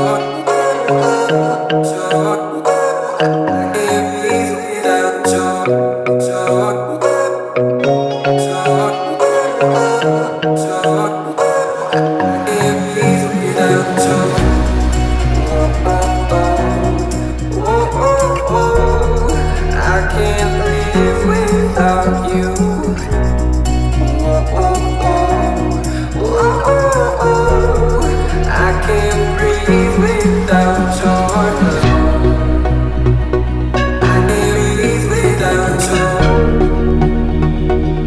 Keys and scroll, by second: 9.2-10.9 typing, 20.8-21.7 typing, 29.2 v, 31.8 ctrl+s, 36.7 h.